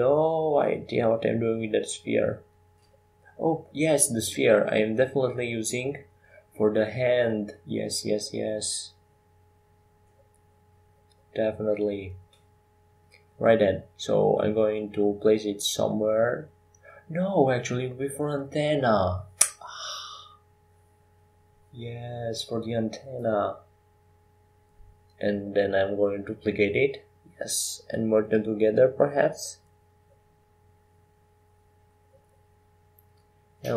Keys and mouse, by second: 0.5 g, 4.3 g, 6.7 g, 9.2 s, 13.0 g, 16.0 KP_5, 16.0 KP_1, 17.4 KP_3, 22.1 r, 24.1 g, 29.2 g.